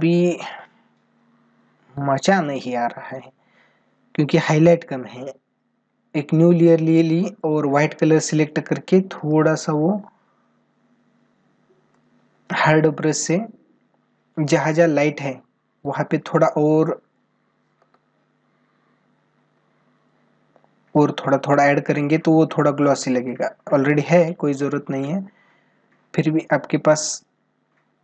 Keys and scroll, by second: 14.0 ctrl+=, 17.5 ctrl+alt+z.